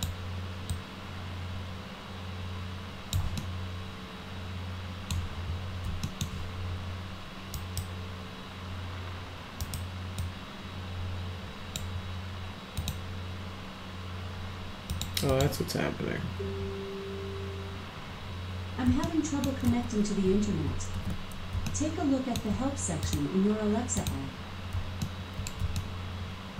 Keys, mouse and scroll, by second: 0.7-3.1 drag, 3.4-5.1 alt+middle drag, 6.1 alt+middle click, 7.6 right click, 9.6 right click, 10.2-11.8 drag, 12.8 click, 14.9 click, 15.3 click, 19.0 alt+middle click, 21.0 ctrl+a, 21.7 alt+middle click, 23.0 click, 24.0 click, 25.0 alt+middle click, 25.7 alt+middle click.